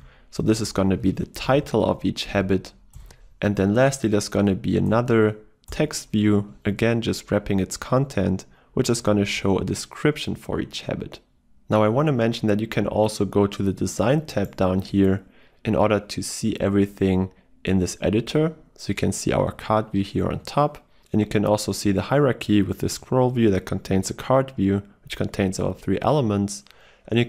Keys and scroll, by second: 3.2 Return.